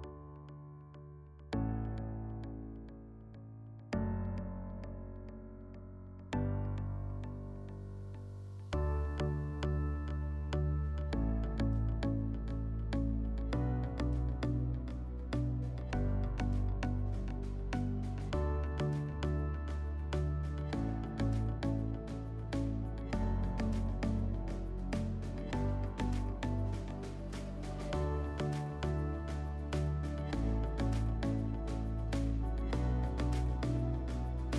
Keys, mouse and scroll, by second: 8.8 click, 23.8-24.9 drag, 29.7-31.3 drag, 32.2-33.8 drag, 34.4-34.5 drag.